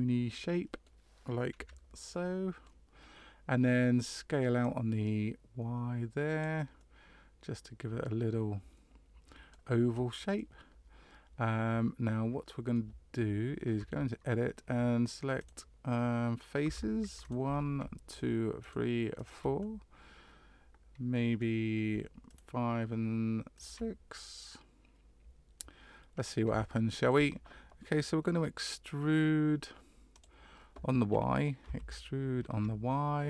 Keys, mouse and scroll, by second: 1.5 KP_Decimal, 2.1 middle click, 4.6 click, 6.7 middle click, 10.3 middle click, 10.3-10.7 scroll down 1, 13.7 Tab, 15.4 right click, 16.6 3, 17.2 right click, 18.0 shift+right click, 18.6 right click, 19.1 right click, 19.6 middle click, 22.2 shift+right click, 23.5 shift+right click, 24.1 middle click, 26.1-26.5 scroll down 1, 26.6 shift+middle click, 30.1 click, 31.6 e.